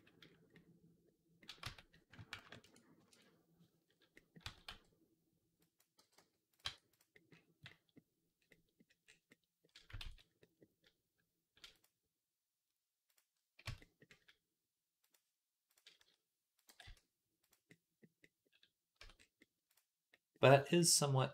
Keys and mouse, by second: 1.5 Tab, 2.3 ctrl+KP_Add, 3.0 ctrl+KP_Add, 4.3 s, 5.8 g, 6.5 Tab, 6.8 click, 9.9 ctrl+s, 11.6 click, 13.5 Tab, 14.8 click, 15.6-19.5 middle drag, 15.8 s, 16.5 g, 18.8 Tab, 19.5 click, 19.6-21.3 middle drag, 20.4 Tab.